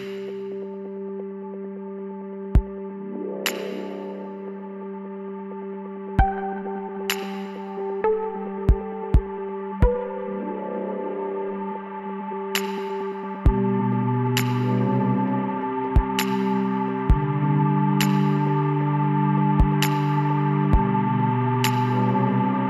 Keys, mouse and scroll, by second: 4.9 Tab, 5.3-7.1 middle drag, 6.8 z, 10.1-14.1 middle drag, 14.3-15.8 right drag, 15.4 Tab, 16.6-18.5 right drag, 17.6 l, 18.4 x, 21.9-22.6 drag.